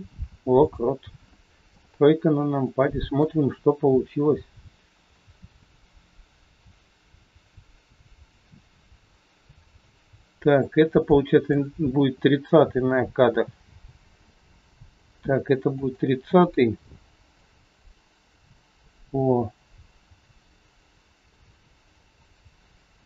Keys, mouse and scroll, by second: 1.6 KP_3, 2.0 scroll down 2, 2.6 shift+middle click, 2.6 scroll down 1, 3.4 scroll up 3, 5.1 click, 5.1 scroll up 1, 11.0 click, 13.6 g, 17.4 click.